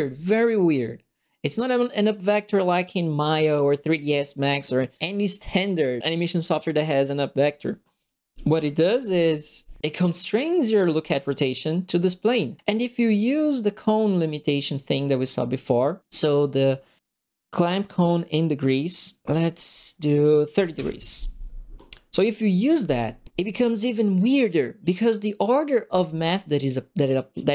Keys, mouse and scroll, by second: 14.6 click, 15.5 click, 20.5 KP_3, 20.5 KP_0, 20.7 KP_Enter.